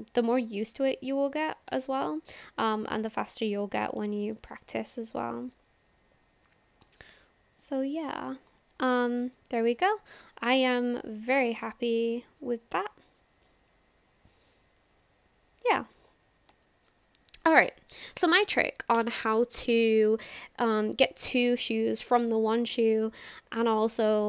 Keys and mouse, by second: 1.4 click, 1.9 shift+click, 3.3 click, 4.7 ctrl+z, 5.5 click, 6.3-8.0 drag, 9.0 middle click, 9.9 middle click, 10.8 Tab, 11.4 click, 12.4-16.1 drag, 16.6 shift+drag, 17.1-17.5 drag.